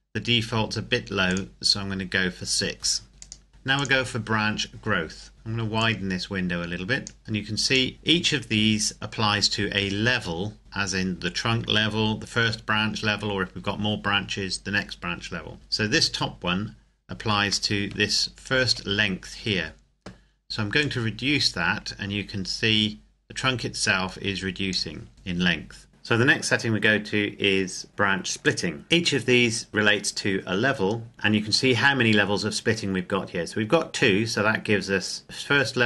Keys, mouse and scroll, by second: 3.1 scroll down 1, 3.2 click, 3.7 click, 5.3 scroll down 1, 5.8 click, 10.7-12.7 scroll up 1, 17.2-17.7 scroll up 1, 17.7 shift+middle click, 20.7 click, 27.5-27.9 scroll up 1, 27.9 click.